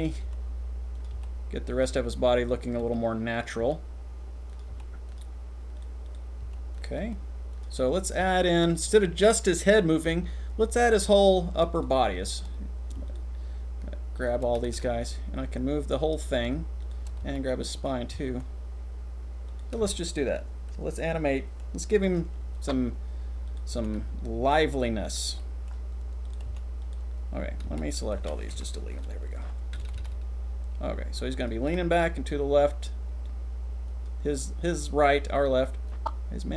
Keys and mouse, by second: 0.2 r, 1.2 g, 2.9 g, 3.7 r, 4.7 g, 6.5 g, 7.1 r, 13.1 shift+click, 14.2 shift+click, 14.6 r, 14.8 r, 16.8 shift+click, 17.2 r, 18.1 r, 18.3 r, 20.7 click, 21.3 click, 22.5 click, 23.4 click, 23.7 g, 26.4 g, 27.6 a, 28.5 Delete, 29.9 r, 29.9 r, 31.8 r, 35.9-36.5 drag.